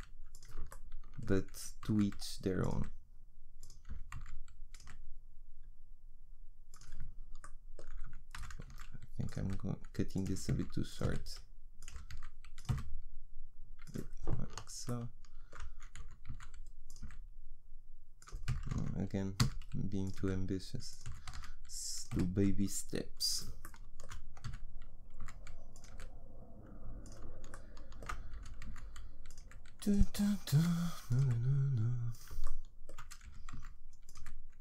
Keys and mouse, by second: 1.6 e, 2.8 s, 3.9 e, 4.8 s, 8.4 g, 9.4-12.7 typing, 16.0 e, 17.0 s, 18.5 g, 20.2 s, 21.1 e, 22.1 s, 24.5 e, 25.9 s, 28.3 e, 29.5 s, 30.2 e, 31.2 s, 33.3-34.6 typing.